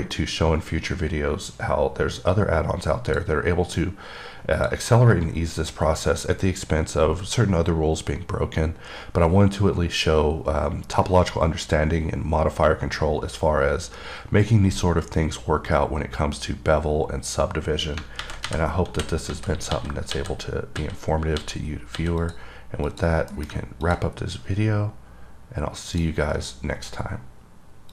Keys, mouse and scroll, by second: 0.4 click, 4.8 click, 22.5 click, 23.2 click, 24.1 click, 24.4-25.8 scroll up 4, 25.8 scroll up 1, 26.2 click.